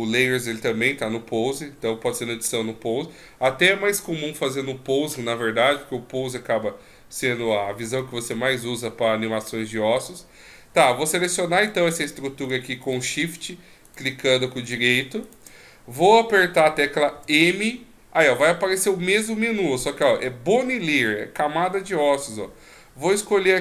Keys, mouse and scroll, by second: 11.6 right click, 12.8 shift+right click, 13.8 shift+right click, 14.6 right click, 15.3 shift+right click, 17.1 m.